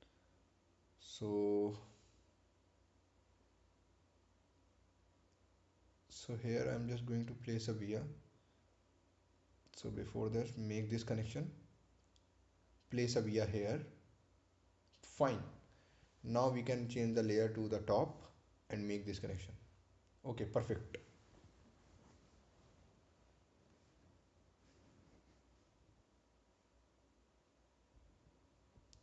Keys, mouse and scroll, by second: 2.7 click, 10.6 click, 11.2 right click, 13.2 ctrl+v, 15.1 click, 17.4 click, 24.5 right click, 24.9 scroll down 1, 27.5-28.8 scroll up 1.